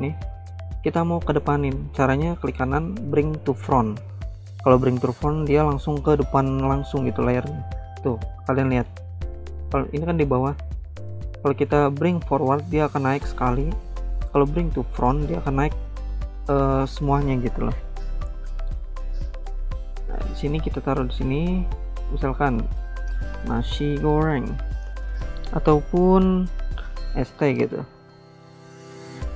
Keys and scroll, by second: 8.8 ctrl+z, 22.8-25.0 typing, 26.8-28.6 typing.